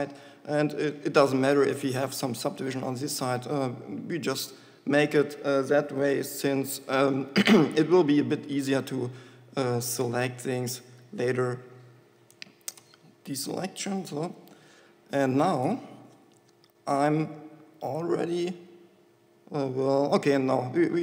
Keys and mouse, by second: 0.7-4.5 middle drag, 7.1-10.0 drag, 13.1 ctrl+a, 14.6 KP_7.